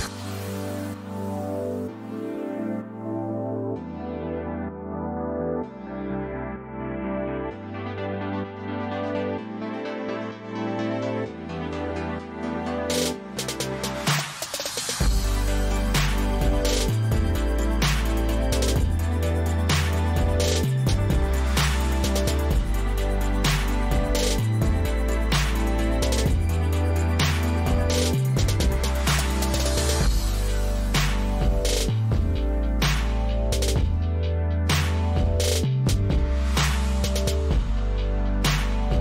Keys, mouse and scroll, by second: 1.3 click, 2.3 ctrl+c, 2.9 ctrl+v, 8.6 click, 9.3 click, 10.1 click, 10.6 click, 12.2 shift+click, 13.3 shift+click, 13.4 shift+click, 23.0-23.4 drag, 24.7-26.6 drag, 26.8 shift+click, 30.6 click, 31.5 click, 32.3 click, 36.0 click.